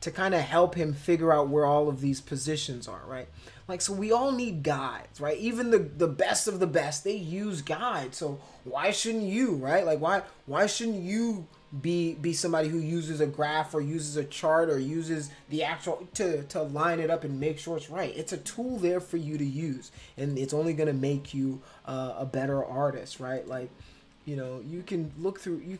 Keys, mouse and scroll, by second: 20.2 click, 23.4 click.